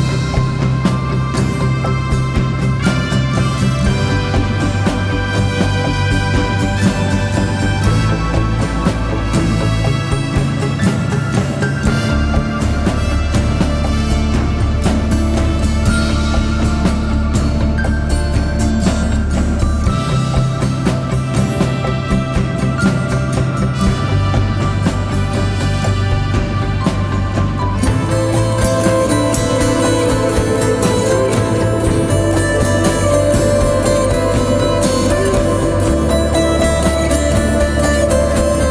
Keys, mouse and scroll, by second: 6.8-9.1 typing, 11.9 double click, 12.2 typing, 14.2 double click, 20.6 scroll down 1, 20.9-21.6 scroll up 1, 22.4 ctrl+t, 23.1 scroll down 2, 26.2 Return, 26.4 alt+scroll up 1, 28.0-28.7 scroll up 1, 28.8 double click.